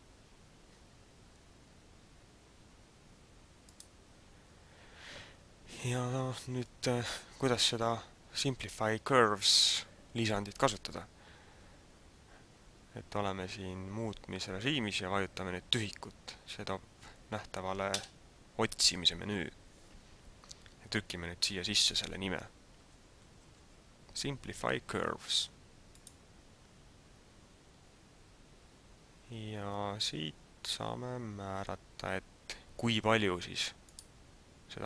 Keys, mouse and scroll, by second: 18.0 space, 33.8 click.